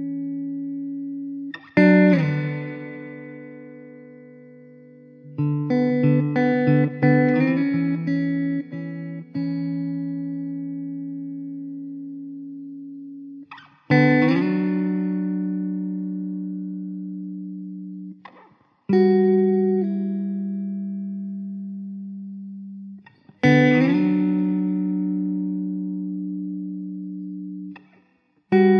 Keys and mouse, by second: 1.0 w, 2.8 w, 9.8 alt+middle click, 11.1 middle click, 15.5 alt+w, 19.0 1.